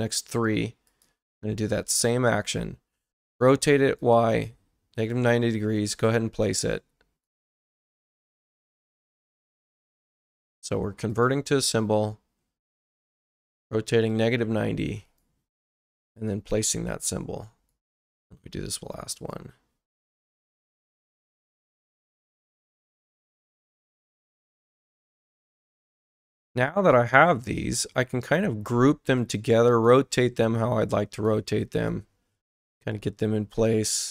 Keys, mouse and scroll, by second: 0.9 click, 3.3 click, 4.0 click, 5.0 click, 5.9 click, 7.2 right click, 9.7 click, 11.1 click, 13.2 click, 14.1 click, 15.0 click, 16.2 click, 17.7 right click, 19.2 click, 20.2 click, 22.8 click, 23.5 click, 24.6 click, 25.6 click, 26.8 right click, 27.4 click, 29.2 click, 31.8 click, 32.9 ctrl+click, 34.0 click.